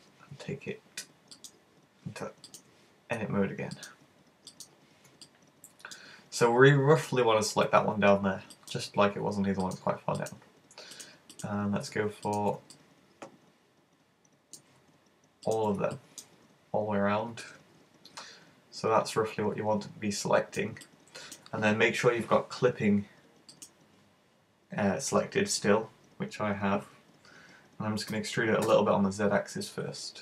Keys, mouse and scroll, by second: 1.4 click, 2.5 right click, 3.8 click, 4.7 click, 5.3 middle click, 7.1 right click, 8.1-8.5 scroll up 3, 8.5 shift+middle click, 9.7 shift+right click, 9.9 shift+right click, 10.3 shift+right click, 11.0 shift+right click, 11.4 shift+right click, 12.3 shift+right click, 12.8 middle click, 15.5 shift+right click, 16.0 middle click, 16.6-17.3 scroll down 4, 17.5 middle click, 20.9 middle click, 23.6 click, 26.1-27.6 scroll up 1, 28.2 e.